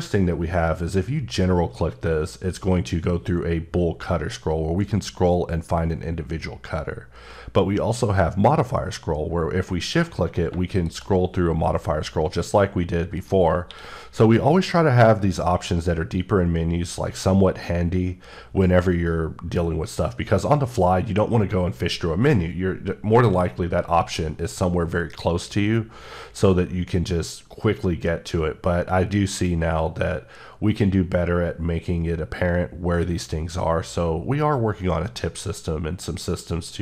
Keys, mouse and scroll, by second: 10.5 q, 10.7 shift+click, 11.3-12.2 scroll up 6, 12.2-12.6 scroll down 5, 13.1 right click, 13.6 q.